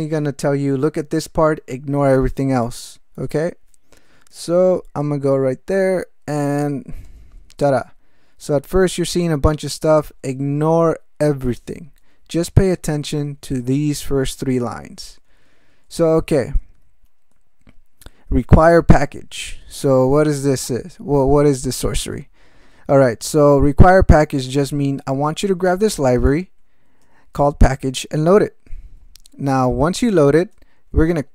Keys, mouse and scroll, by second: 7.0 Return, 12.5 ctrl+space, 12.8 ctrl+n, 14.7 ctrl+g, 15.3 ctrl+p, 15.9 ctrl+e, 16.6 ctrl+alt+m, 17.3 ctrl+e, 18.1 ctrl+alt+m, 18.5 ctrl+alt+space, 18.6 ctrl+alt+e, 18.9 ctrl+alt+g, 19.4 ctrl+alt+m, 20.1 ctrl+space, 20.2 ctrl+e, 20.6 ctrl+g, 23.4 alt+m, 24.2 alt+f, 25.3 alt+b, 26.2 ctrl+=, 27.0 ctrl+BackSpace, 29.2 ctrl+n, 29.7 ctrl+a, 30.4 ctrl+space, 30.7 ctrl+e.